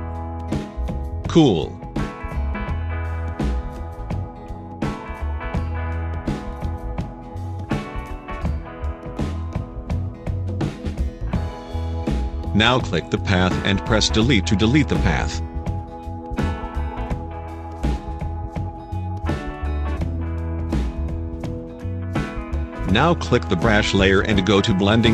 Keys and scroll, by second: 6.9 v, 13.9 Delete, 16.0 ctrl+0.